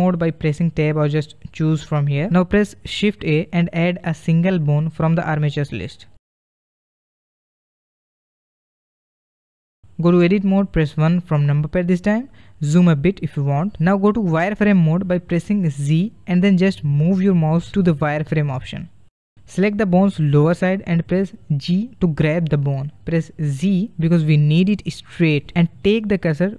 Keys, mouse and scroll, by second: 1.5-2.9 drag, 2.9-4.1 middle drag, 4.1 shift+a, 8.8-11.0 drag, 11.0 KP_1, 12.6-13.6 scroll up 4, 13.6 shift+middle click, 14.5 z, 21.0 click, 22.3 g.